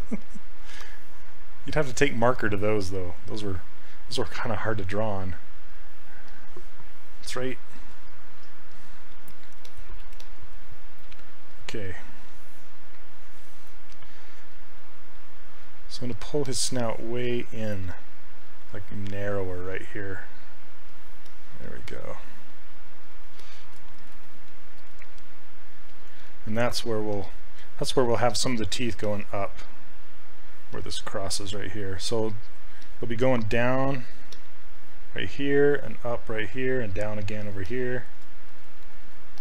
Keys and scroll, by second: 33.3 s.